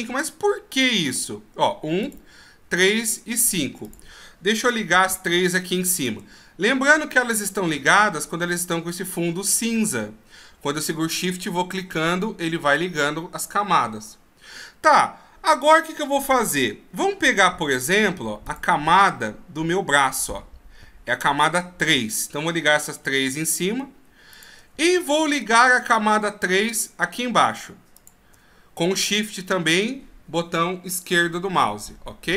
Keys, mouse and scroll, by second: 0.8 click, 2.2 click, 2.9 click, 4.0 click, 5.2 shift+click, 6.0 shift+click, 17.4 click, 18.5 click, 23.6 shift+click, 24.4 shift+click, 28.1 shift+click.